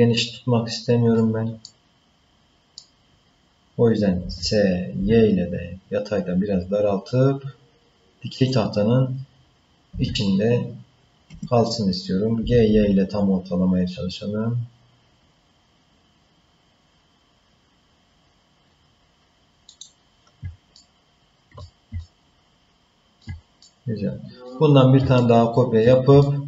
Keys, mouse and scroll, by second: 1.6-2.8 middle drag, 4.2 s, 9.9 s, 12.4 g, 20.7 ctrl+middle click, 22.0-23.2 shift+middle drag, 23.6 middle click, 25.2 ctrl+middle click, 26.2 shift+middle click.